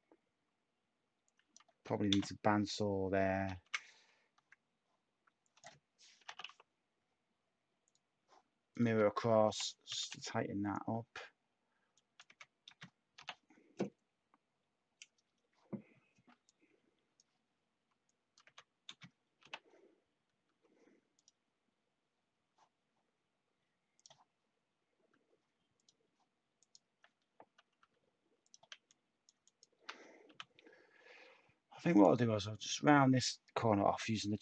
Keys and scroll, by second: 1.7 x, 3.4 ctrl+z, 4.3 x, 5.9-6.7 typing, 9.2-10.0 typing, 12.2-13.6 typing, 18.4-19.9 typing, 20.4 Tab, 25.1 Tab, 27.8 Tab, 30.2 u.